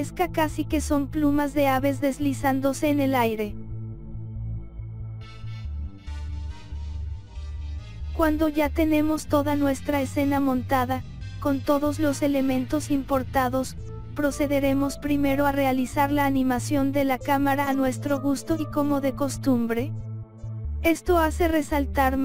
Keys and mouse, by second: 0.5 click, 1.4 click, 4.7-5.7 drag, 6.2 click, 8.2-10.2 drag, 10.8 click, 13.1 click, 13.6 KP_7, 14.2 click, 14.7 click, 15.3 click, 16.4 KP_0, 17.6 click, 20.7 click, 21.5 click.